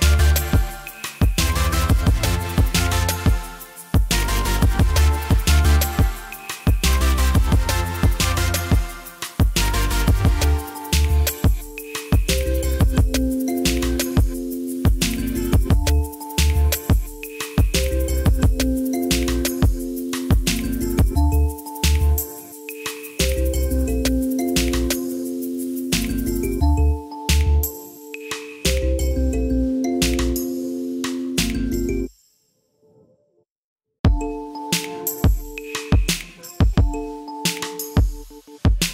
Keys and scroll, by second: 29.1-30.2 typing.